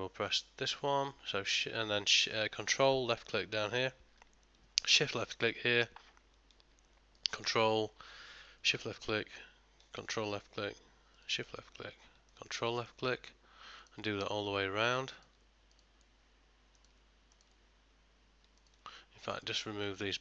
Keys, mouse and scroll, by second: 0.4 click, 3.7 ctrl+click, 4.9 shift+click, 7.3 ctrl+click, 8.4 shift+click, 10.1 ctrl+click, 11.2 shift+click, 12.4 ctrl+click, 13.0 middle click, 13.9 shift+click, 15.2 ctrl+click, 15.8 shift+click, 16.9 ctrl+click, 17.4 shift+click, 18.7 ctrl+click, 19.4 shift+click, 19.9 shift+click.